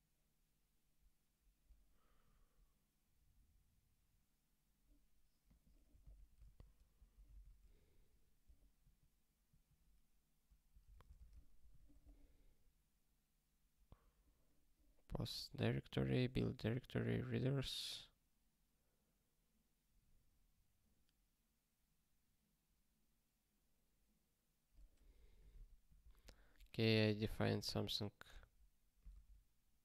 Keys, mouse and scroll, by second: 1.4 click, 2.1 scroll up 1, 5.4 click, 5.9 ctrl+alt+t, 6.4 ctrl+s, 7.5 ctrl+k, 8.8 ctrl+/, 9.5 ctrl+/, 10.8 ctrl+space, 10.9 ctrl+a, 11.1 alt+;, 11.7 ctrl+s, 12.2 scroll up 1, 13.8 scroll down 1.